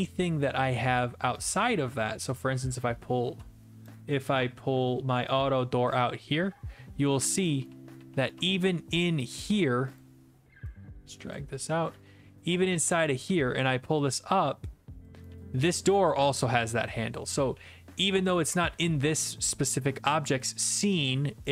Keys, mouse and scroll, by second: 1.5 right click, 3.8 click, 4.5-4.8 scroll, 7.4 click, 7.7-9.0 typing, 8.3 right click, 9.3 click, 10.0 click, 11.3 click, 11.9 w, 12.8 click, 13.3 q, 15.0 click, 15.1-18.6 typing, 16.1 middle click, 18.0-19.1 right drag.